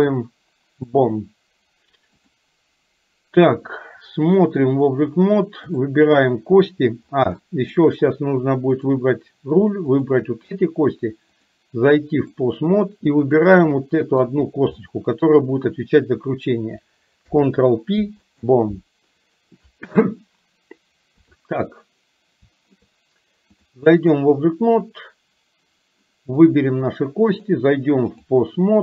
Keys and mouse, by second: 2.2 click, 4.3 click, 5.8 click, 7.5 shift+middle click, 11.5-12.5 drag, 13.8 middle click, 14.8 shift+middle click, 17.2 ctrl+p, 21.2 KP_3, 23.6 click, 27.5-28.5 drag.